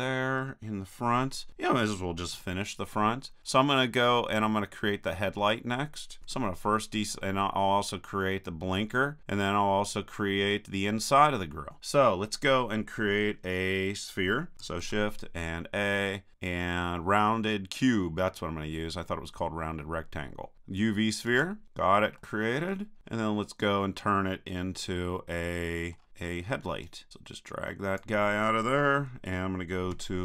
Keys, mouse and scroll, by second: 2.4 KP_1, 3.1 middle click, 3.3 click, 5.4 middle click, 6.3 a, 14.8 shift+a, 22.2-25.0 drag, 25.0-26.8 middle drag, 26.8-28.3 drag, 29.9 KP_3.